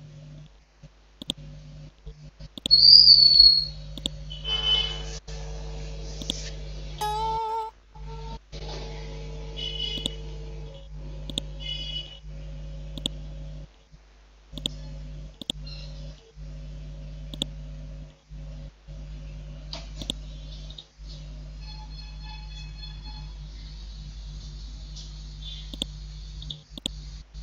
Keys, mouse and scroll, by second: 2.5 shift+click, 4.0-5.7 drag, 6.9 F5, 7.3 Delete, 13.0 shift+click, 15.8 scroll up 1, 17.3 shift+click, 18.2 scroll down 1, 20.0 click, 23.1 scroll up 1, 25.7 click.